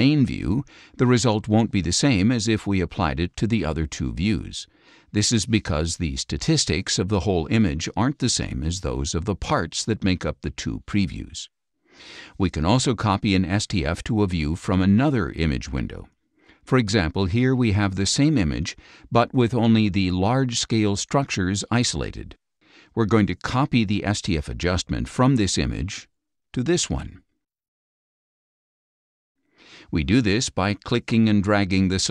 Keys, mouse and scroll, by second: 2.3 click, 12.5 click, 15.3-17.4 drag, 18.1 click, 26.5 click, 30.5-32.1 drag.